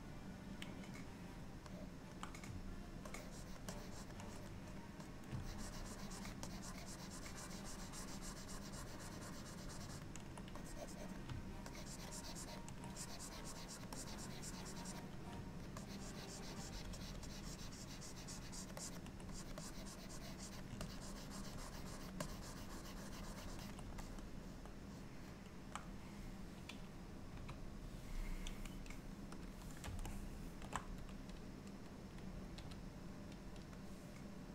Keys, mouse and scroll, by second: 1.8 middle click, 3.2 ctrl+click, 3.8 ctrl+click, 4.5 click, 5.5 ctrl+click, 6.5 ctrl+click, 10.6 click, 11.8 ctrl+click, 12.2 ctrl+click, 13.0 click, 13.5 click, 14.0 click, 15.9 ctrl+click, 16.8 ctrl+click, 17.1 ctrl+click, 17.3 ctrl+click, 17.6 ctrl+click, 18.9 ctrl+click, 19.4 click, 19.7 click, 20.9 ctrl+click, 22.3 click, 24.1 middle click, 27.4 KP_3, 29.5 click, 30.2 shift+middle click, 32.6 f.